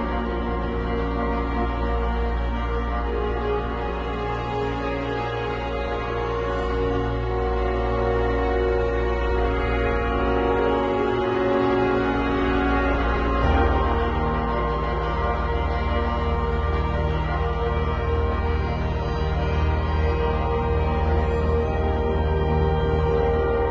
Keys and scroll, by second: 2.4 i, 9.7 b, 11.5 [, 15.1 x, 19.0 ], 20.7 [, 21.9 ], 22.9 [.